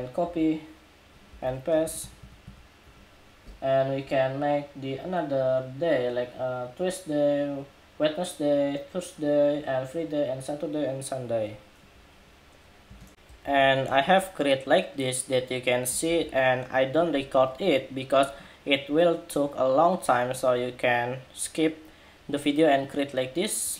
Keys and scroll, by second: 0.0 super+c, 1.1 super+v, 13.1 super+=, 15.8 super+-.